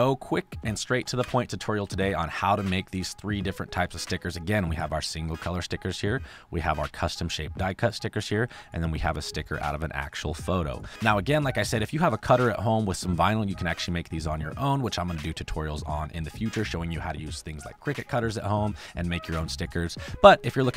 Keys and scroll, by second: 0.5 space, 1.1 f, 1.8 space, 20.5 space.